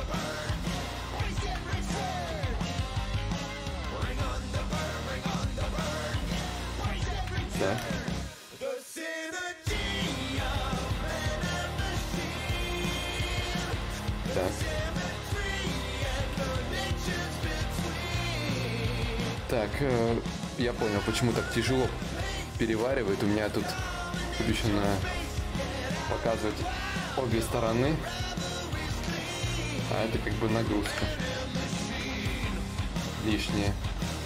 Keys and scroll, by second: 2.8 shift+f, 4.5 ctrl+z, 27.7 d, 29.5 d.